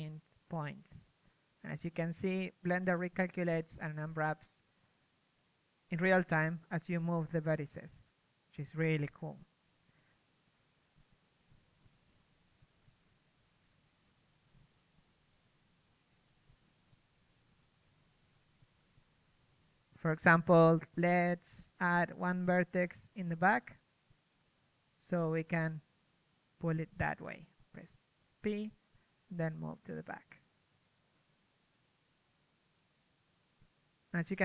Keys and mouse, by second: 0.5-1.9 right drag, 1.4 g, 1.9-2.8 drag, 5.9-7.9 right drag, 7.9 s, 10.9 middle click, 11.4 s, 14.3 s, 16.9 middle click, 17.1 g, 18.4-20.1 middle drag, 22.6 p, 23.1 g, 25.5 KP_3, 28.2 g, 33.5 click, 33.5 g.